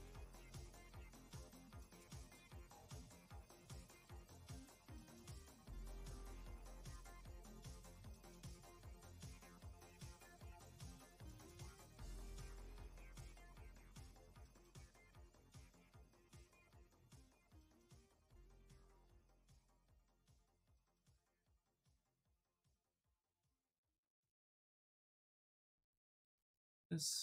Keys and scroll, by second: 12.3 q, 17.7 w, 23.8 q, 25.6 w.